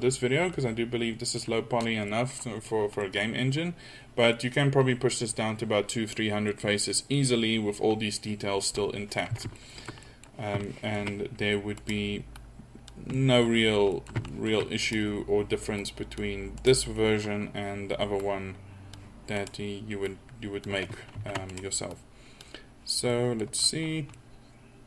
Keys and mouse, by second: 3.9 middle click, 8.8 middle click, 8.9 middle click, 11.8-12.9 drag, 13.2 middle click, 14.5-15.8 middle drag, 17.6 click, 19.4 middle click, 21.2 ctrl+z, 23.1 middle click.